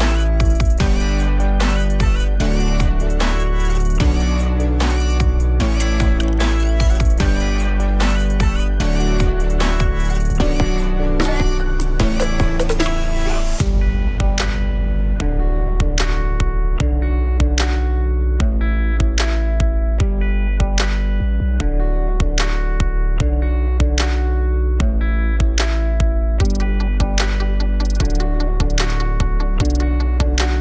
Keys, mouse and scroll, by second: 2.7-3.2 alt+drag, 3.2-3.6 scroll down 3, 3.6 s, 9.2 click, 9.8-10.9 drag, 10.9 KP_0, 19.7-21.1 drag, 21.1 KP_0, 24.6 click, 25.3 KP_7, 26.3 click, 26.7-27.6 scroll down 1, 27.6 shift+d.